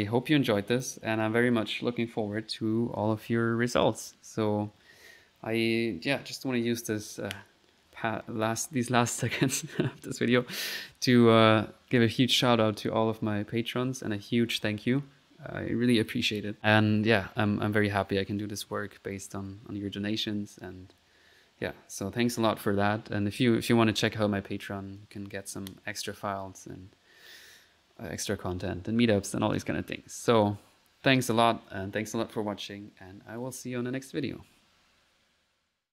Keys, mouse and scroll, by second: 0.4 click, 33.8-34.5 typing.